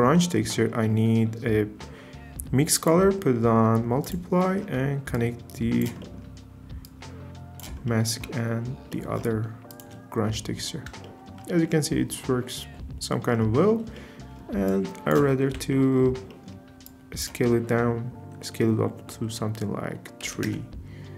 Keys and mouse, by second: 2.8-4.1 drag, 5.1 click, 6.8 click, 9.7 ctrl+shift+click, 14.7 click, 15.5 ctrl+t, 16.3 middle click, 17.0-20.6 drag.